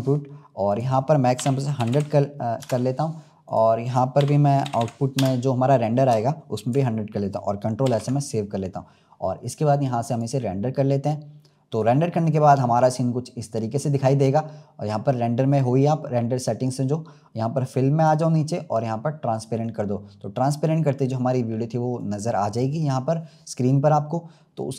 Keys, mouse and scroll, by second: 1.8 0, 3.4-4.7 drag, 4.7 0, 10.6 click, 11.9-12.3 scroll down 2, 16.8-17.7 scroll down 7, 17.9-18.3 drag, 18.3-19.3 scroll down 3, 19.3 click, 20.6-21.8 scroll up 1, 21.9-24.7 drag.